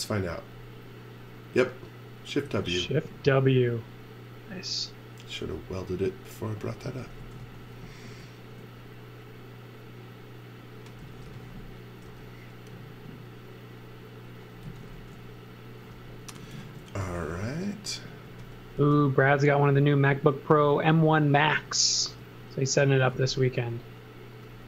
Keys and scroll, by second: 2.1-3.1 typing, 6.6-8.5 typing, 10.8-12.0 typing, 14.6 z, 14.9 x, 16.1-18.7 typing, 22.0 space.